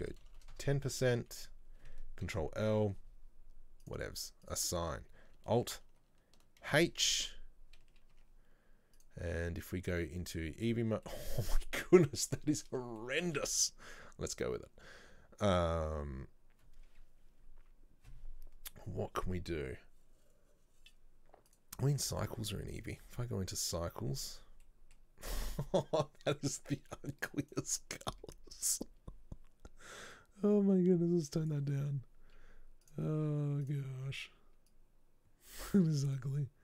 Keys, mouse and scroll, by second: 2.4 ctrl+l, 3.9 click, 4.6 click, 6.7 alt+h, 8.2 Tab, 9.9 click, 11.2-16.1 middle drag, 21.6 click, 22.2 click, 22.8-24.8 drag, 24.8-25.3 middle drag, 25.3-26.1 scroll up 2, 27.5 click, 28.8 click, 33.0 click, 33.8 click.